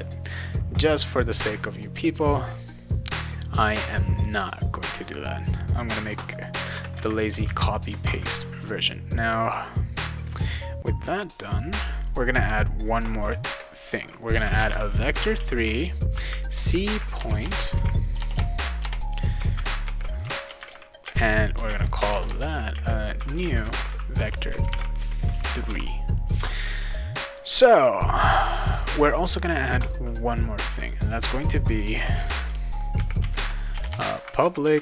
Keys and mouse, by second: 1.8 right click, 4.5 click, 5.4 click, 6.5 Return, 6.7 Return, 7.4 ctrl+v, 8.1 ctrl+s, 11.3 click, 14.1-25.3 typing, 25.6 ctrl+s, 31.0 click, 31.9 Return, 32.7-34.8 typing.